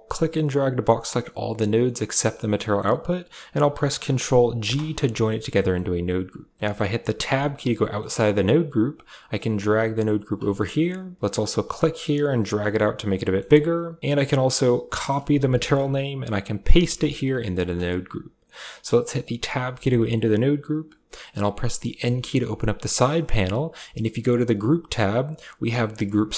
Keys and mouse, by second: 2.4 click, 4.4 ctrl+g, 5.1 click, 5.4 click, 6.3 click, 7.1 Tab, 7.6 middle click, 9.1-10.3 drag, 10.4 middle click, 11.8-12.9 drag, 13.0 middle click, 13.4 click, 14.5-16.0 drag, 16.3 ctrl+click, 17.1 click, 17.4 drag, 18.3 middle click, 19.5 Tab, 21.0 click, 21.8 Tab, 21.8 n, 24.1 click.